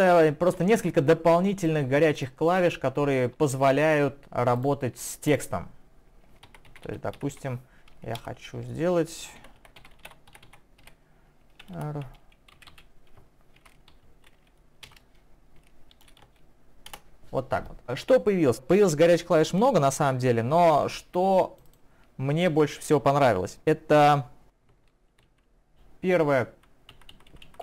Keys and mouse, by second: 0.5 typing, 1.6 click, 1.9-4.2 typing, 2.2 click, 2.6 double click, 4.6 click, 5.3 click, 25.7 ctrl+alt+Right.